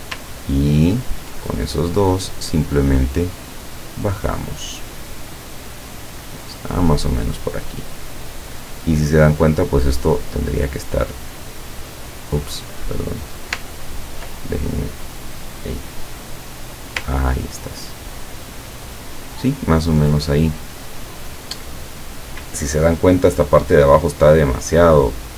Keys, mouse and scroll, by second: 0.7-1.3 ctrl+scroll down 2, 2.0-8.3 drag, 10.3 click, 11.5-12.6 drag, 13.8 ctrl+scroll up 2, 15.5-17.2 drag, 17.4-18.0 ctrl+scroll down 2, 18.3-18.7 ctrl+scroll down 2, 23.8 click.